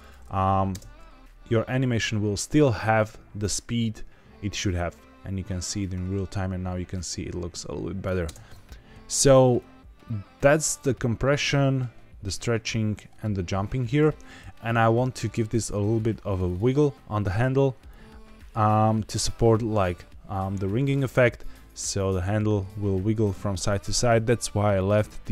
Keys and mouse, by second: 0.6 space, 8.2 space, 9.5-14.0 drag, 16.3 click, 17.8-19.2 drag, 24.7 click.